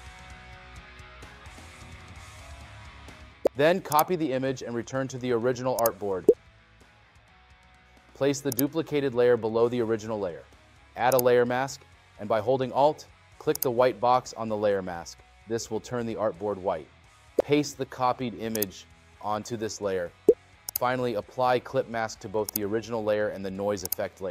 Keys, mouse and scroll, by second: 1.0 scroll, 21.1 right click, 23.9 right click.